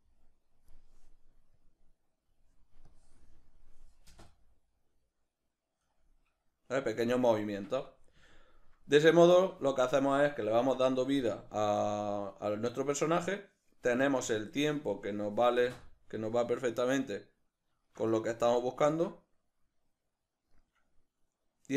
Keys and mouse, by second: 4.2 space, 7.5 Escape, 7.9-14.3 middle drag, 14.3-17.2 drag, 15.5 space, 17.2-18.8 middle drag, 20.1 middle click.